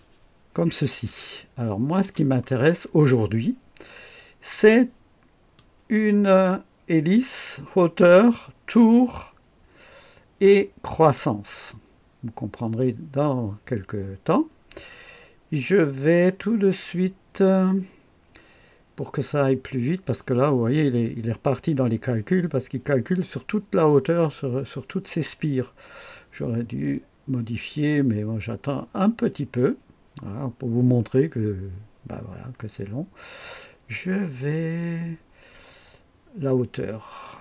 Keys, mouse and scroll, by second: 0.7-2.0 drag, 5.5-11.1 drag.